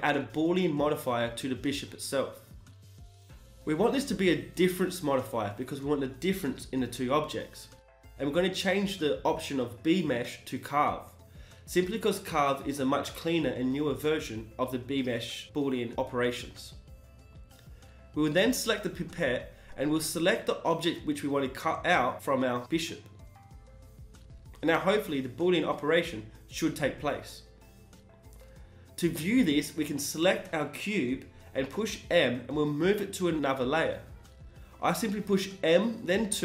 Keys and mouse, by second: 0.0-0.6 middle drag, 0.9-23.9 drag, 24.1 KP_1, 24.3 z, 25.0-28.2 middle drag, 28.4 click, 31.0 right click, 31.0 m.